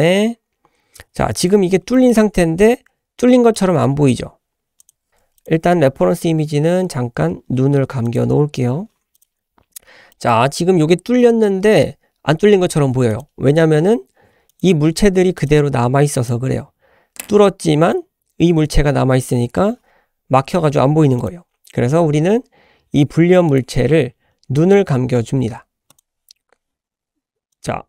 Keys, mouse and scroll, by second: 1.6 scroll down 2, 1.9 shift+middle drag, 3.5-3.9 middle drag, 4.8 click, 5.1 h, 5.4 click, 6.3-7.9 scroll up 2, 8.0-8.4 drag, 9.1 click, 9.6-10.1 scroll down 1, 10.1-12.2 middle drag, 13.1 click, 13.6-14.0 scroll up 2, 14.5 click, 15.4-16.8 drag, 21.2 click, 23.5 click, 23.8 scroll down 2, 25.9 click, 27.5 click.